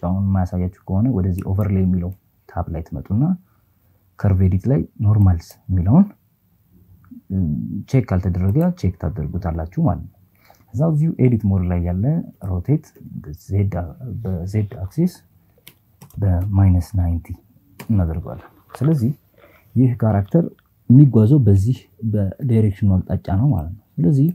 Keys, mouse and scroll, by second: 0.8-7.5 drag, 11.0 r, 11.6 z, 14.3 KP_9, 14.6 KP_0, 15.1 KP_Subtract, 16.4 KP_Enter, 22.2 click.